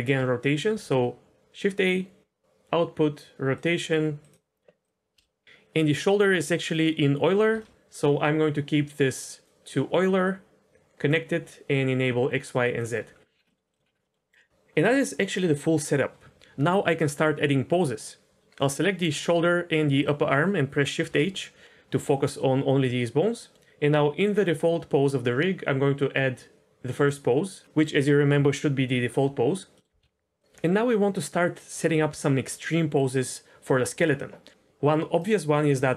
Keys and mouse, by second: 0.5 shift+a, 4.8 click, 5.1 n, 7.5 n, 9.2 click, 10.2 click, 10.4-11.0 drag, 11.7 click, 13.4 middle click, 13.6 middle click, 14.0 middle click, 20.0 shift+click, 21.0 shift+h, 23.5 ctrl+z, 27.0 click, 29.7 middle click, 30.0 KP_1, 30.4 click, 35.7 r.